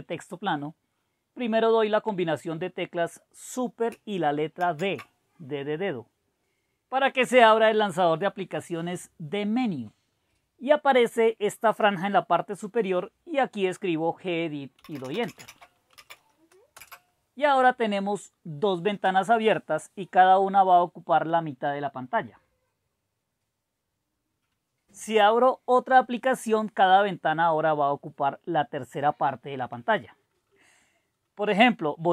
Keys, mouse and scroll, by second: 4.7 super+d, 14.5-16.5 typing, 16.7 Return.